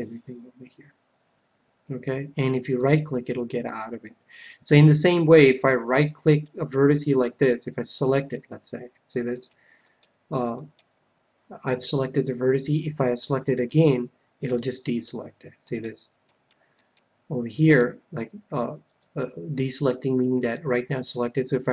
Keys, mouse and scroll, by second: 2.8-4.5 right drag, 6.2-12.4 right drag, 13.7-15.1 right drag, 14.4-16.2 middle drag, 15.6-19.3 right drag, 20.4-21.7 right drag.